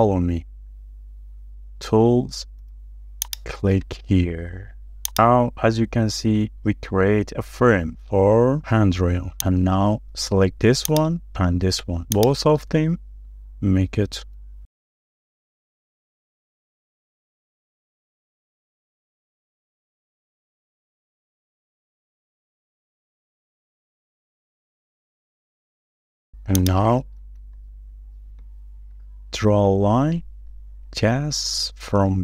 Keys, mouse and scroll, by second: 0.2 shift+middle click, 5.9 scroll down 1, 6.2 shift+middle click, 8.5 scroll up 1, 8.6 shift+middle click, 8.8-9.4 shift+scroll down 2, 9.7 middle click, 10.1-10.4 scroll up 1, 10.4 shift+middle click, 11.5-11.8 scroll up 1, 12.2 ctrl+click, 14.5 right click, 16.9-17.3 scroll down 1, 17.4 shift+middle click, 18.6 scroll up 1, 19.5-19.9 scroll down 1, 21.0 m, 23.0-23.6 scroll down 1, 23.6-23.9 scroll down 1, 24.2 m, 24.3-24.9 shift+scroll down 2, 25.0 shift+middle click, 25.2 shift+scroll down 1, 26.9 scroll down 1, 27.2 shift+middle click, 27.6 scroll up 1, 28.5 shift+middle click, 28.8-29.1 shift+scroll down 2, 29.1 shift+middle click, 29.5-30.1 scroll up 1, 30.8 l.